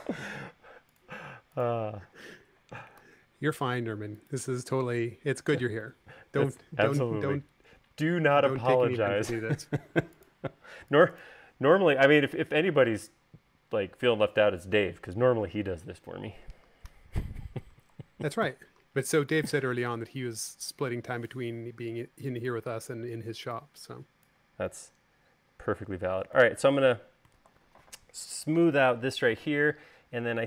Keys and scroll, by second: 3.2 u, 18.7 v.